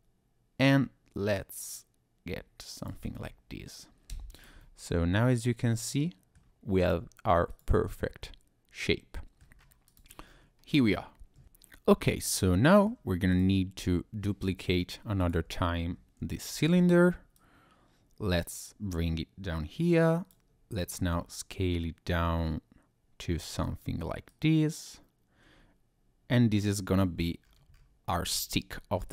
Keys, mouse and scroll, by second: 2.8 click, 4.1 Tab, 4.6 click, 4.6 middle click, 7.5 click, 8.2 middle click, 9.6-9.9 scroll down 2, 9.9 click, 10.2 scroll up 1, 10.6 scroll down 1, 10.6-11.2 scroll down 1, 12.4 middle click, 13.3 click, 15.2 click, 16.2 shift+d, 16.7 Escape, 17.3 click, 21.0 s, 23.6 click, 24.3 click, 27.4-28.1 scroll up 2, 28.1 Tab, 28.9-29.1 scroll down 2.